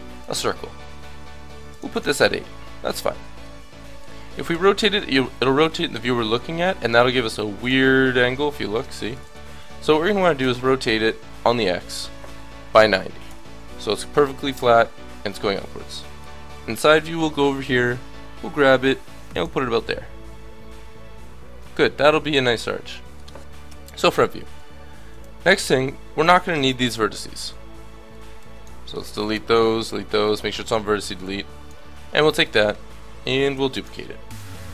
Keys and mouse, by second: 1.7 click, 2.6-4.0 middle drag, 4.5 r, 9.2 ctrl+z, 10.2 r, 16.2 KP_3, 17.2 g, 21.5 middle click, 23.6 KP_1, 23.8 middle click, 24.5 a, 25.0 b, 27.0 Delete, 28.1 b, 29.3 Delete, 31.1 b, 33.4 shift+d, 34.5-34.7 drag.